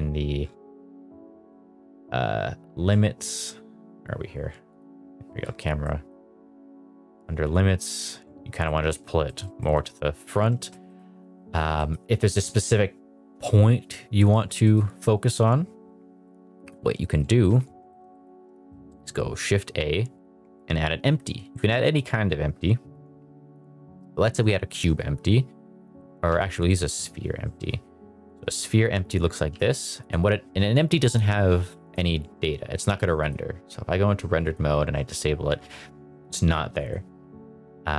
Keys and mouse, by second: 1.4-2.0 middle drag, 4.7 click, 5.8-6.1 middle drag, 7.4 click, 8.5 middle drag, 9.2 middle drag, 9.5 shift+middle drag, 10.5 shift+middle drag, 10.8 middle click, 11.7 middle click, 14.1 middle click, 14.6 middle click, 16.9 middle drag, 17.4 middle drag, 17.8 shift+middle drag, 18.1 middle drag, 18.4 shift+a, 25.6 x, 26.2 shift+a, 29.5 g, 30.5 g, 31.5 g, 33.5 click, 34.4 click, 36.7 click.